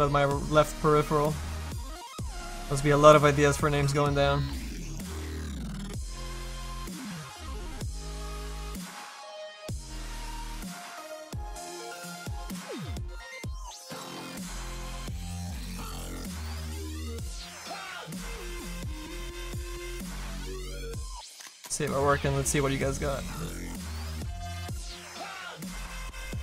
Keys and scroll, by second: 6.4 s, 11.8 F2, 16.6 s.